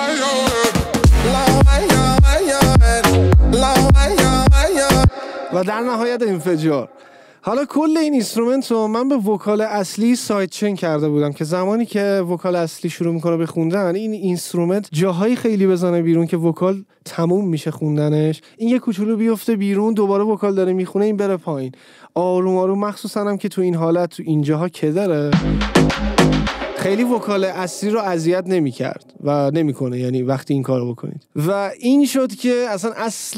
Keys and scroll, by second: 5.2 space, 25.4 space, 26.8 space.